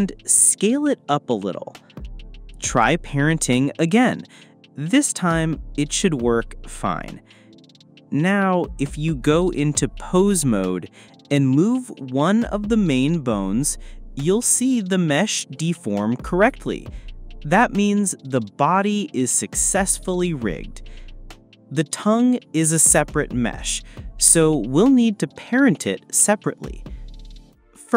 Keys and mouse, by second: 1.7 click, 3.3 click, 4.9 shift+click, 6.2 click, 7.3 shift+click, 8.1 shift+click, 9.6 shift+click, 11.1 ctrl+p, 15.1 click, 17.3 r, 18.4 x, 24.8-25.7 drag, 26.3 click.